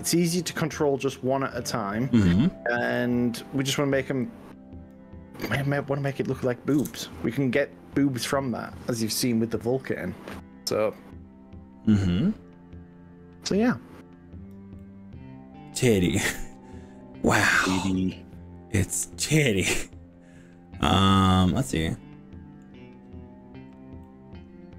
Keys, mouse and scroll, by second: 0.9 right click, 4.3 click, 6.9 ctrl+KP_Add, 9.7 click, 14.8-22.7 middle drag, 24.0-24.7 middle drag.